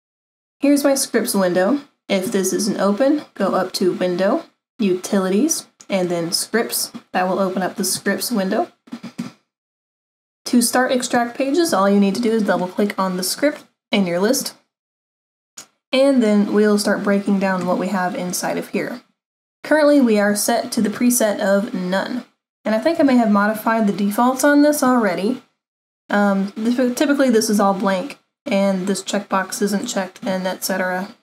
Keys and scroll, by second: 20.8 super+=, 23.1 super+=.